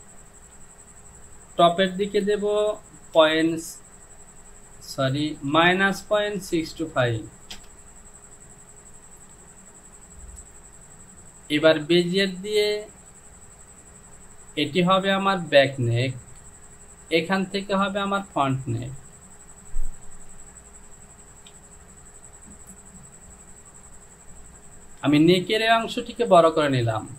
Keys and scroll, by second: 3.2 KP_Decimal, 5.1-7.0 typing, 5.6 KP_Subtract, 7.6 Return, 21.5 Delete, 25.2 Return.